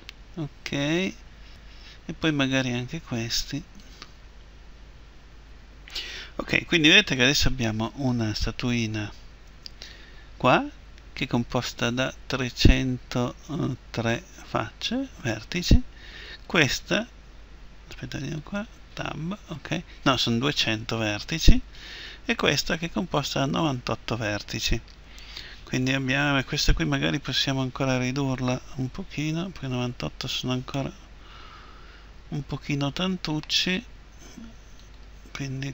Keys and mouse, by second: 3.5-5.4 right drag, 8.1-12.7 right drag, 9.5 Tab, 16.3-20.3 right drag, 18.9 Tab, 21.0 Tab, 21.8-25.5 right drag, 22.3 Tab, 34.8-35.7 right drag.